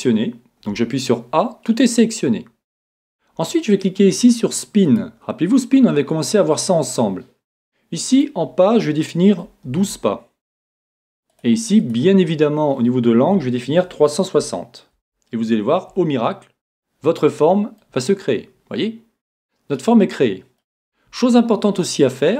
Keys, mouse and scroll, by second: 18.4-19.6 middle drag, 21.8-22.3 middle drag.